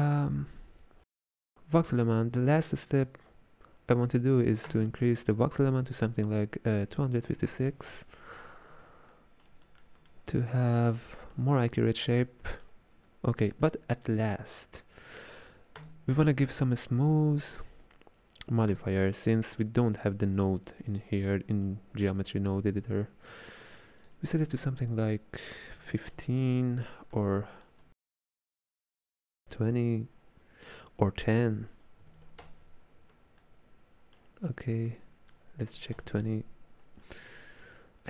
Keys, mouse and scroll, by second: 4.7-7.8 drag, 9.1-14.1 middle drag, 14.1 click, 15.8-19.4 drag, 24.0-27.1 drag, 27.4-31.4 middle drag, 31.4-33.4 drag, 33.4-34.9 middle drag, 34.9-37.1 drag, 37.1-38.0 middle drag.